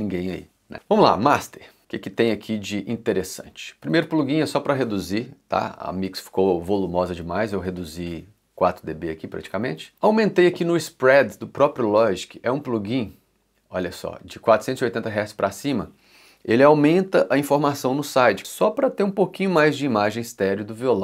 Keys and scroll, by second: 2.2 x, 3.9 l, 9.5 l, 9.7 2.